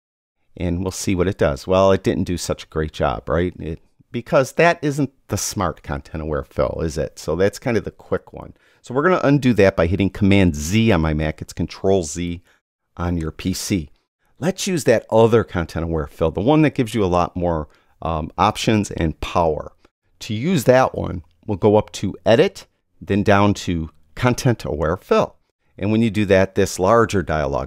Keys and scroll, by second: 10.6 super+z.